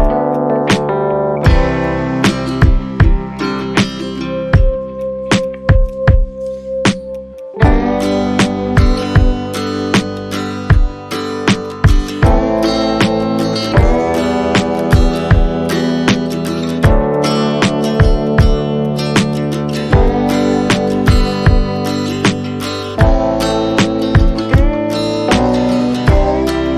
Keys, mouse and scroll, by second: 23.2-24.0 scroll down 1, 24.8-25.7 scroll up 1.